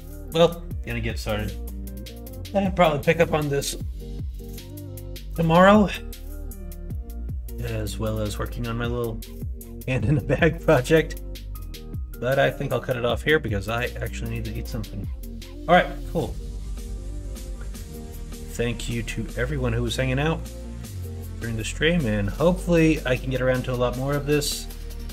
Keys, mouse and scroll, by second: 0.2 middle click, 6.8 middle click, 7.5 middle click, 8.0 middle click, 9.6 middle click, 10.4 middle click, 11.0 middle click, 11.7 middle click, 13.0 middle click, 13.9 middle click, 19.0 middle click, 19.5 middle click, 20.1 middle click, 20.5 middle click, 20.9 middle click, 22.1 middle click, 24.6 middle click.